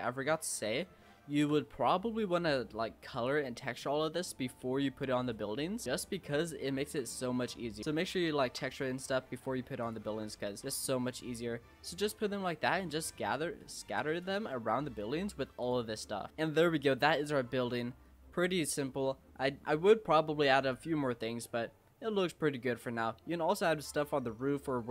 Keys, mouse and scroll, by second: 0.9 shift+middle click, 1.5 scroll down 1, 1.7 scroll up 1, 1.9 middle click, 2.5-3.3 scroll up 1, 3.3 click, 5.6 Tab, 5.8 middle click, 5.8 scroll down 4, 6.1 scroll up 1, 6.2-6.8 middle drag, 6.8 Tab, 7.0-7.8 scroll up 3, 7.8 click, 8.4 shift+d, 10.1 Tab, 10.3 scroll down 4, 10.6 middle click, 10.6 click, 10.9-14.3 middle drag, 14.3 scroll down 2, 14.5-15.6 middle drag, 15.6 click, 16.3-17.7 middle drag, 17.7 scroll up 2, 18.0-19.4 middle drag, 19.4 scroll down 2, 19.7-21.3 middle drag, 21.3-22.6 scroll up 1, 22.6-22.9 scroll down 2, 22.9-24.9 middle drag.